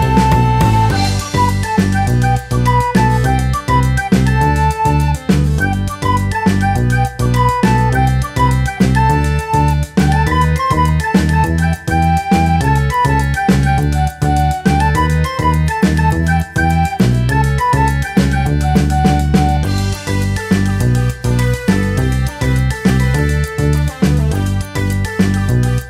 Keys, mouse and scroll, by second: 0.1-10.7 typing, 0.6 shift+middle click, 0.8-1.4 scroll up 3, 0.9 shift+middle click, 1.3 shift+click, 1.4 shift+middle click, 2.8 scroll down 3, 2.9 shift+middle click, 3.4 shift+middle click, 3.4 scroll up 2, 3.5 shift+middle click, 4.4 scroll down 3, 4.5 shift+middle click, 4.7 shift+middle click, 4.9 shift+middle click, 5.2 shift+middle click, 5.3 scroll down 1, 6.0 shift+middle click, 6.0 scroll up 4, 6.1 shift+middle click, 6.5 shift+middle click, 6.7 shift+middle click, 7.0 shift+middle click, 7.1 scroll up 3, 7.5 scroll down 3, 7.6 shift+middle click, 7.8 shift+middle click, 8.7 shift+click, 9.0 shift+middle click, 9.0 scroll up 3, 9.5 shift+middle click, 9.7 shift+middle click, 10.0 shift+middle click, 10.1 scroll up 3, 10.5 scroll down 3, 10.6 shift+middle click, 11.1 scroll down 3, 11.2 shift+middle click, 11.2 scroll up 3, 11.3 shift+middle click, 11.6 shift+middle click, 11.9 shift+click, 12.1-25.8 typing, 13.0 shift+middle click, 13.0 scroll up 3, 13.2 scroll down 9, 13.3 shift+middle click, 13.3 scroll up 1, 13.8 shift+middle click, 14.0 shift+middle click, 14.8 shift+middle click, 15.5 shift+middle click, 15.9 shift+middle click, 16.0 scroll up 5, 16.0 shift+middle click, 17.1 scroll down 4, 17.2 shift+middle click, 17.4 shift+middle click, 18.1 scroll down 3, 18.2 shift+middle click, 18.3 scroll up 3, 18.3 shift+middle click, 18.7 shift+click, 19.5 shift+middle click, 19.7 shift+middle click, 19.8 scroll up 2, 20.0 scroll down 3, 20.1 shift+middle click, 20.1 scroll up 2, 21.5 shift+middle click, 21.6 scroll down 3, 21.8 shift+middle click, 22.7 scroll down 1, 22.8 shift+middle click, 23.2 shift+middle click, 24.0 shift+middle click, 24.4 shift+middle click, 24.5 scroll up 1, 25.5 scroll down 2, 25.6 shift+middle click, 25.7 scroll up 1.